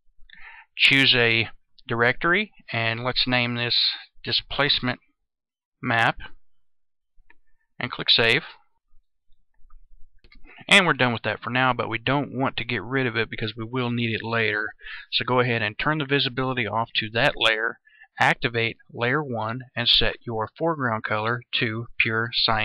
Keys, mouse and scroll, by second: 3.3-5.9 typing, 8.4 click.